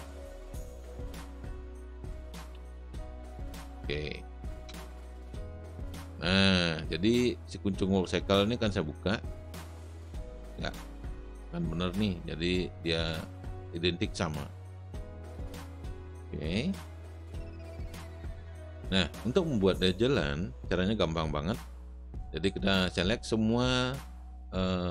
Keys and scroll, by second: 0.0-3.0 typing, 4.6 Return, 17.7 space.